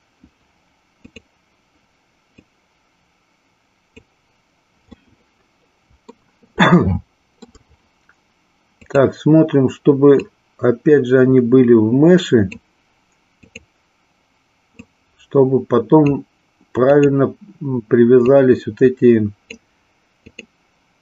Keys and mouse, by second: 2.3-4.0 drag, 5.0-6.3 middle drag, 6.7 shift+middle click, 8.7 click, 10.3-12.5 drag, 13.4 click, 14.7-16.0 drag, 16.7 click, 18.2-19.4 drag, 20.2 click.